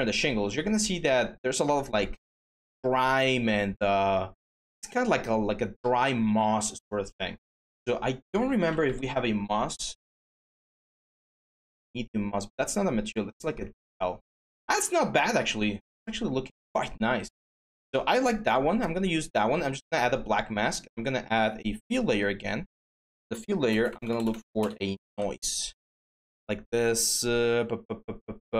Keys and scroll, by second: 8.1-9.0 typing, 23.5-25.5 typing.